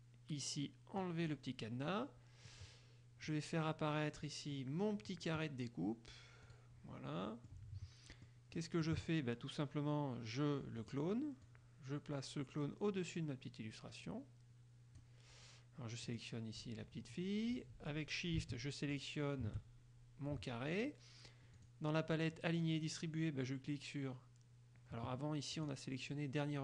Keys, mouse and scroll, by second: 1.1 click, 3.4-4.6 drag, 6.6 click, 7.4 click, 7.4 middle click, 7.9-8.3 scroll up 1, 8.3 click, 8.3 middle click, 8.6 scroll up 1, 8.7 click, 8.7-10.9 middle drag, 10.9 click, 11.2 middle click, 11.5-15.3 drag, 16.2 click, 19.1 shift+click, 21.7 click, 25.7 click.